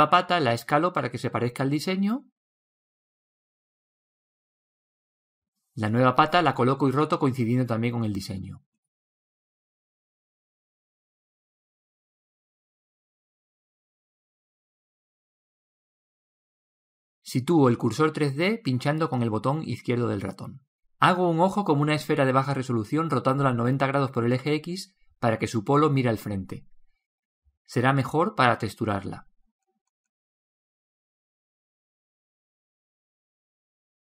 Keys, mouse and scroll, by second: 2.0 click, 3.4 s, 6.2 r, 9.0 g, 11.3 KP_3, 14.3 KP_1, 15.9-17.5 middle drag, 19.1 click, 20.3 shift+a, 23.5 r, 26.9 s, 32.3 s.